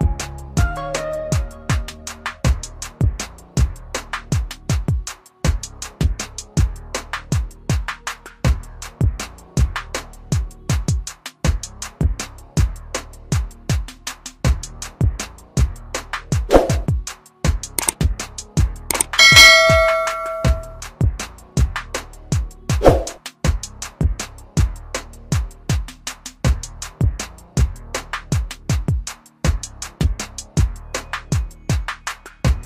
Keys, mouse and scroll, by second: 6.5 click, 10.4 typing, 11.8 click, 24.5 alt+click, 24.9 typing, 26.2 click, 27.0 typing.